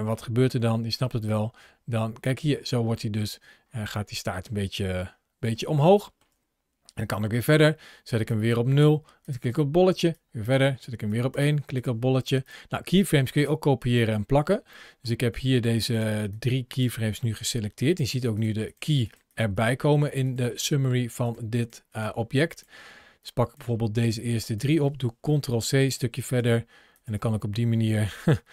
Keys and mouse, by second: 1.1 click, 2.9-4.3 middle drag, 4.9-5.3 shift+middle drag, 5.8-6.1 shift+middle drag, 6.9 click, 8.1 click, 9.0 click, 9.9 click, 10.9 click, 11.6 click, 12.7-13.3 drag, 14.6 middle click, 15.6-16.2 middle drag, 16.2-16.6 drag, 18.9 click, 19.1 click, 19.4 click, 20.1 click, 20.4 click, 23.1 click, 23.9-24.4 drag, 25.1 ctrl+c, 25.7 click, 26.8 click, 27.0 ctrl+v.